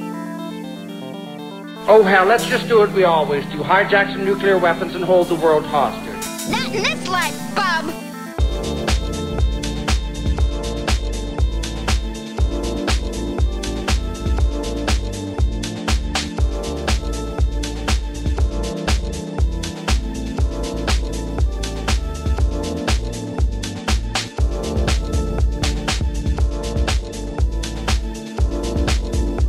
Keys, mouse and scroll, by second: 0.1 middle click, 0.5 g, 0.6 y, 1.4 click, 2.2 shift+click, 2.7-6.1 typing, 3.1 click, 3.5 shift+click, 4.1 click, 5.4 click, 6.7 click, 6.9 click, 7.1 middle click, 7.3 shift+middle click, 7.4 shift+click, 7.7 Tab, 8.2-9.3 drag, 9.6-10.6 middle drag, 10.8 Tab, 11.1 click, 11.6 g, 11.7 z, 12.4 click, 12.6 click, 13.1 g, 13.3 z, 13.4 click, 14.0 shift+click, 14.5 g, 14.6 z, 14.9 click, 15.4 Tab, 15.8 click, 16.0 shift+click, 16.6 shift+click, 16.9 g, 17.0 z, 17.3 click, 17.6 Tab, 17.8-18.3 middle drag, 18.8-20.2 drag, 20.4 middle click, 20.8 shift+middle click, 21.2 Tab, 21.5 shift+click, 21.7 g, 22.1 z, 23.4 g, 23.5 z, 23.7 click, 23.9 click, 24.4 g, 24.4 z, 24.9 click, 25.1 middle click, 25.6 middle click, 26.6 g, 27.1 click, 27.6 click, 27.9 click, 28.1 g, 28.2 click, 28.6 g, 28.9 click.